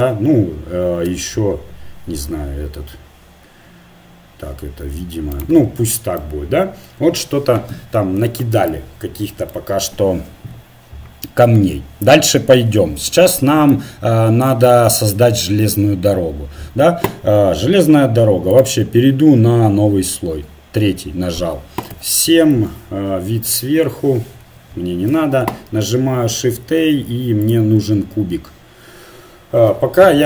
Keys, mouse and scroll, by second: 0.0 r, 3.3-8.9 middle drag, 14.6-15.8 middle drag, 18.5-20.2 drag, 21.9 KP_7, 24.4 KP_1, 25.7 shift+a.